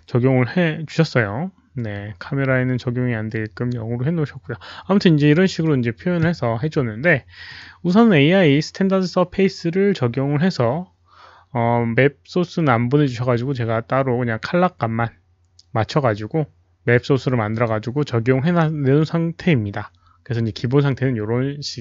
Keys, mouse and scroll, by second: 2.0 click, 7.5 click, 17.5 click.